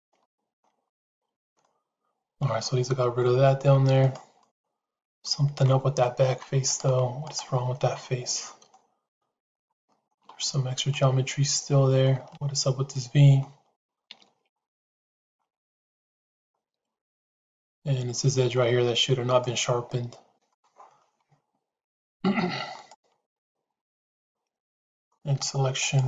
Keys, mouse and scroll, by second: 0.8 shift+middle click, 1.5 middle click, 3.1 middle click, 3.9 click, 4.3-5.5 middle drag, 6.6 click, 7.1 click, 7.7 middle click, 9.0 middle click, 9.6 shift+middle click, 10.9-11.9 middle drag, 12.3-13.3 middle drag, 15.9 shift+z, 16.3-17.8 middle drag, 18.0 middle click, 19.1 click, 20.4 middle click, 20.9-22.3 middle drag, 22.6 click, 23.1 middle click, 24.8 click.